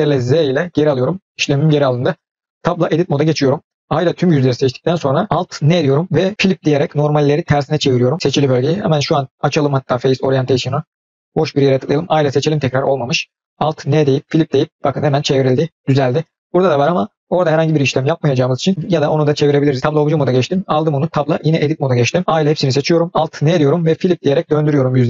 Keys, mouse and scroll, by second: 0.4 ctrl+z, 2.8 Tab, 3.9 a, 5.6 alt+n, 8.9-10.6 drag, 11.0 click, 12.0 a, 13.8 alt+n, 18.8-19.8 scroll up 1, 22.4 a, 23.4 alt+n.